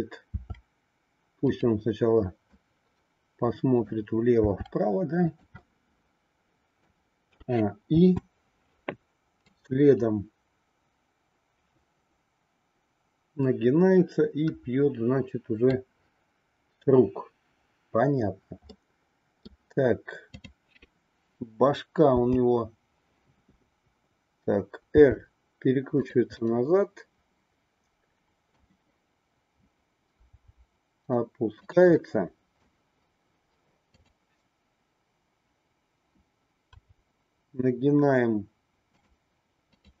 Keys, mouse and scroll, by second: 0.3 r, 2.5-4.1 middle drag, 4.4 r, 5.6-6.9 middle drag, 7.3 a, 7.9 i, 9.5-15.7 drag, 18.7 middle click, 22.1 KP_7, 24.9 r, 26.3-28.6 middle drag, 30.3 r, 31.9 middle click, 36.8 r, 39.7-40.0 drag.